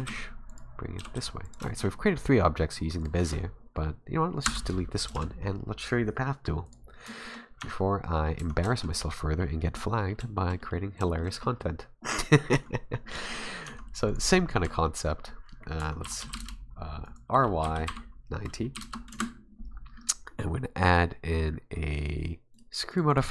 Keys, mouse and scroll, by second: 1.0 g, 1.7 shift+middle click, 3.0 right click, 4.5 Delete, 5.1 shift+a, 7.1 shift+middle click, 7.6 Tab, 8.4 Tab, 8.7 shift+middle click, 9.4 scroll down 1, 9.6 middle click, 10.2 shift+middle click, 10.6 middle click, 10.9 scroll up 2, 11.1 shift+middle click, 11.4 middle click, 11.9-12.3 scroll down 2, 12.5 Tab, 13.6 Tab, 14.1 right click, 14.6 Tab, 15.8 Tab, 16.0 r, 17.6 r, 19.7-20.7 scroll up 3, 22.5 click, 22.9 click, 23.1 click.